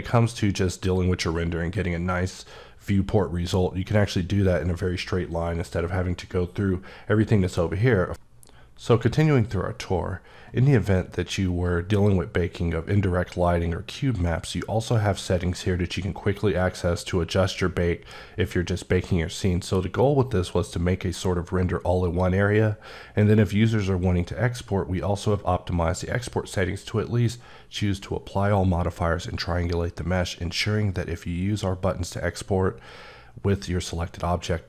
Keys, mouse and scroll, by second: 14.3 click, 21.9 click, 23.1 click.